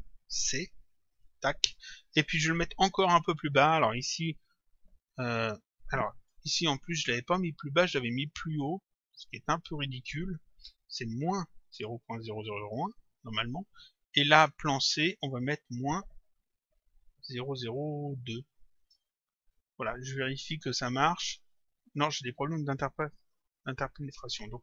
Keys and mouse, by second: 0.5 shift+c, 1.2 click, 3.5 click, 8.2 click, 9.6 click, 10.7 Home, 14.3 click, 16.5 Home, 18.9 Return, 20.9 click, 23.4 click.